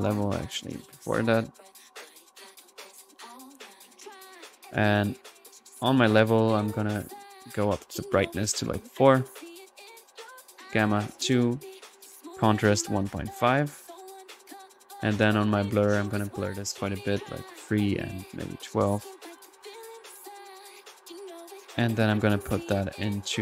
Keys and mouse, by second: 0.3-0.6 right drag, 0.6 click, 0.8-1.9 typing, 1.9 click, 2.4 drag, 3.6-5.4 ctrl+drag, 3.6 typing, 8.4-8.8 drag, 10.4 drag, 10.9 drag, 14.2-19.3 drag, 19.3 middle click, 19.6-20.2 drag, 20.4-23.4 drag.